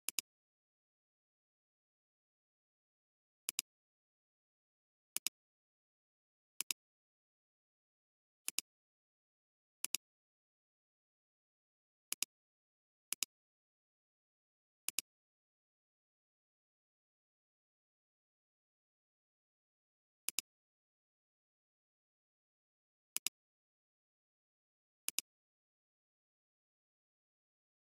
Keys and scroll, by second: 2.6 ctrl+z, 3.4 ctrl+alt+space, 6.6 space, 23.1 alt+space, 23.8 alt+space.